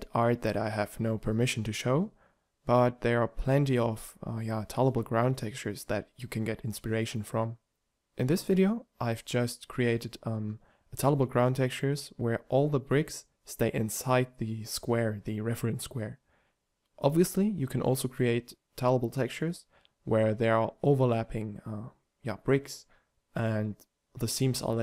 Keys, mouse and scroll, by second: 4.4 shift+d, 5.8 r, 7.3 g, 10.4 shift+d, 14.2 shift+d, 14.6 r, 16.1 g, 17.6 shift+d, 19.6 shift+d, 21.3 g, 23.2 shift+d.